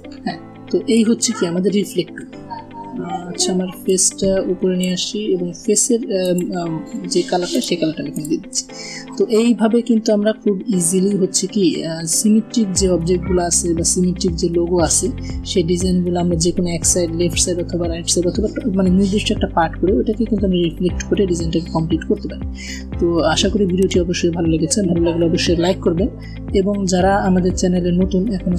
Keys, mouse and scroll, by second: 3.5-4.7 drag, 7.2 click, 7.5 a, 7.7 click, 9.9 v.